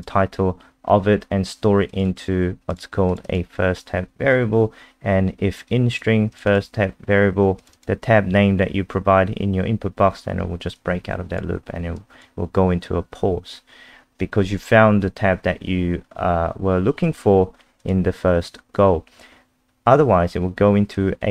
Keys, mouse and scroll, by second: 2.1 click, 2.7 click, 3.2 click, 3.2 click, 5.7 click, 6.5 click, 7.6 click, 7.7 click, 10.7 click, 18.3-19.3 scroll down 1, 20.9 click.